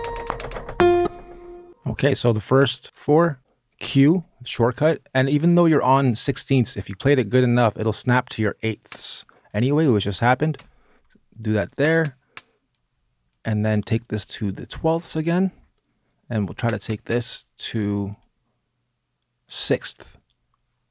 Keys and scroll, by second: 0.7 space, 3.6 q, 10.3 q.